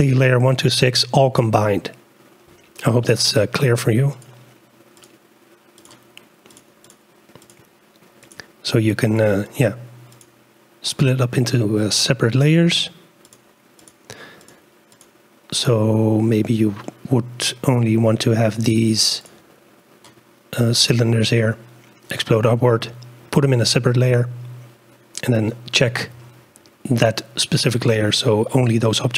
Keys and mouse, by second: 3.1-4.5 drag, 5.8 click, 6.5 click, 6.9 click, 11.0-16.5 drag, 16.8-17.9 drag, 19.2 click, 27.8-29.1 drag.